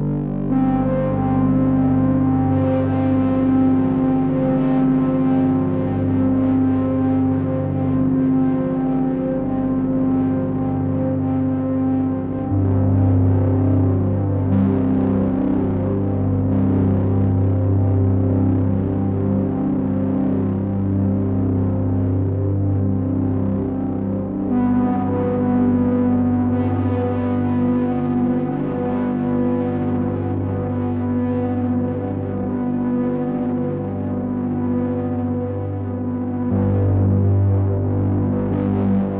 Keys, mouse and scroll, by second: 0.1 click, 2.2 click, 9.3 click, 10.7 click, 23.5 click, 25.3 click, 26.6-28.3 scroll down 4, 28.3 click, 30.6 click, 31.8-33.2 scroll up 4, 33.2 click.